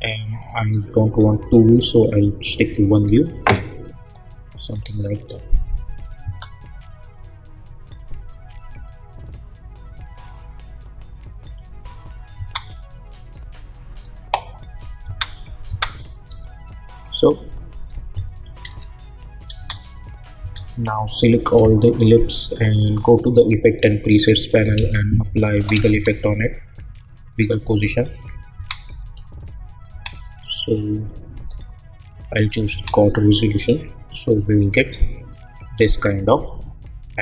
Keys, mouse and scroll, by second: 2.6-4.1 scroll up 1, 4.1 click, 6.2 space, 12.3 space, 13.3-15.0 drag, 15.0 space, 16.3 j, 17.0-18.6 drag, 18.6 ctrl+z, 19.5 space, 21.3 click, 22.5 shift+click, 23.6 click, 24.7 ctrl+a, 25.0-26.4 typing, 27.3 click, 27.3 click, 28.5 space, 30.4 click, 32.7 space.